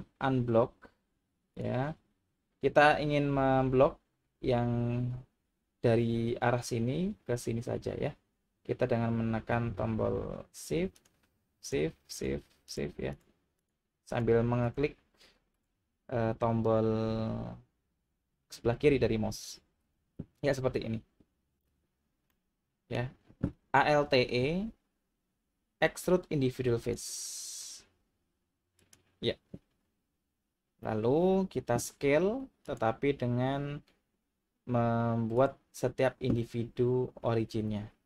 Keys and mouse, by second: 1.6 click, 11.6 shift+click, 12.7 shift+click, 13.1 shift+click, 14.1 shift+click, 15.5 shift+click, 22.3-22.9 middle drag, 24.3 alt+e, 28.8 click, 32.8-35.5 drag.